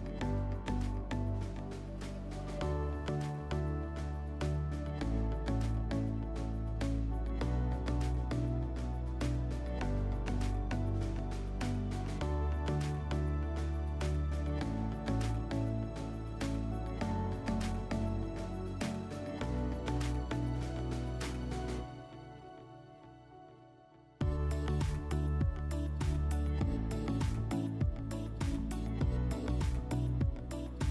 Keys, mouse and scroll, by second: 10.5 4, 13.0 click, 14.3 click, 15.5 scroll, 21.4 click, 22.7 click, 22.9 click.